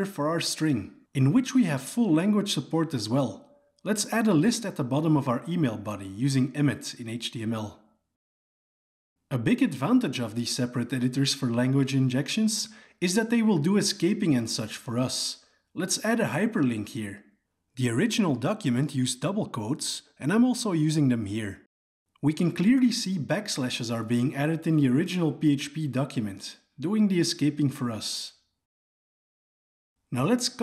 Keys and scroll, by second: 7.2 Tab.